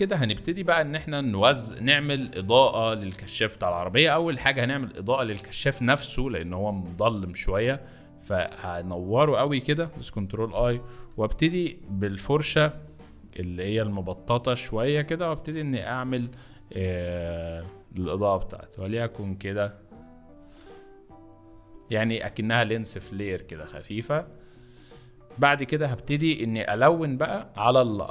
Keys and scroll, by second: 0.9 space, 1.7 z, 9.7 ctrl+i, 16.0 ctrl+z, 17.0 [, 21.8 ctrl+z.